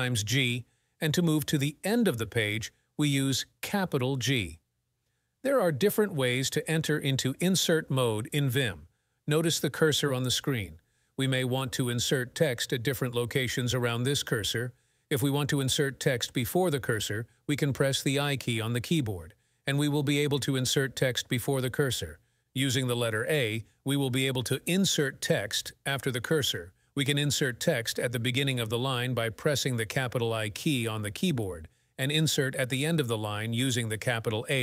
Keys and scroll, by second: 2.8 shift+g, 16.9 i, 19.8-22.0 typing, 23.1 a, 23.3 space, 23.8 space, 24.8 ', 25.9 Escape, 27.8 shift+i, 30.6 /, 33.1 shift+a, 33.5 space.